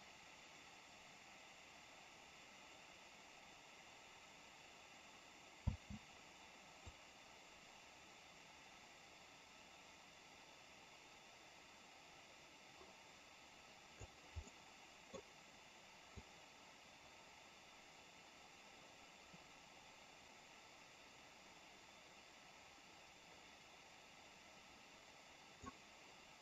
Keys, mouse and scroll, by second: 5.5 space, 6.8-14.0 drag, 14.5 middle click, 16.1-25.6 drag.